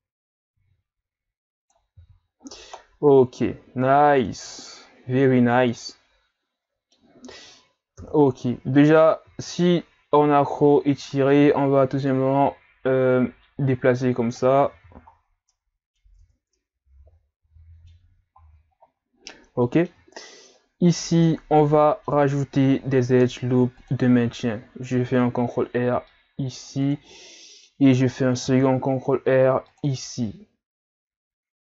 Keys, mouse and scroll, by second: 2.0 z, 2.4-2.7 scroll down 2, 2.7 scroll up 1, 2.7-5.7 middle drag, 8.0 KP_3, 8.8-9.3 scroll up 3, 9.3 z, 11.3 click, 14.7 z, 15.5 middle click, 16.2 Tab, 16.6-18.7 middle drag, 18.7-19.6 scroll up 4, 19.6 middle click, 19.9 Tab, 20.1-21.4 scroll up 2, 21.4-21.8 scroll down 1, 21.8-22.8 middle drag, 22.8 ctrl+r, 27.1-28.4 middle drag, 28.4 ctrl+r.